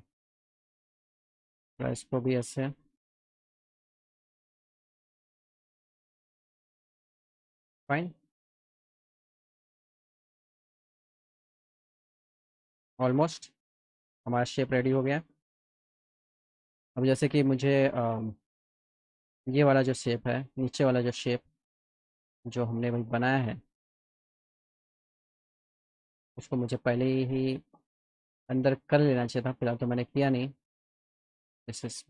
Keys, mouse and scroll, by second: 0.2 click, 0.4 click, 1.5-2.6 drag, 3.6 click, 3.8 click, 4.7-6.3 drag, 6.5 middle click, 6.7 alt+middle click, 7.2 alt+middle click, 8.3 middle click, 9.0 alt+middle click, 10.7 click, 11.0 click, 11.4 click, 12.1-13.5 alt+middle drag, 14.1 click, 14.5 alt+middle click, 16.9 click, 17.9 middle click, 20.5 click, 23.1 middle click, 25.3 click, 26.1 alt+middle click, 27.5 click, 28.2 click, 28.7 click, 30.4 click.